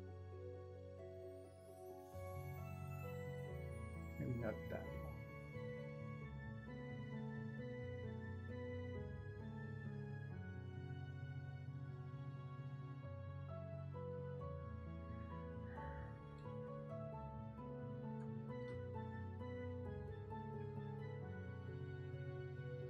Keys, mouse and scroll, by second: 0.8 ctrl+shift+z, 1.5 ctrl+z, 15.3 ctrl+z, 21.2 ctrl+z.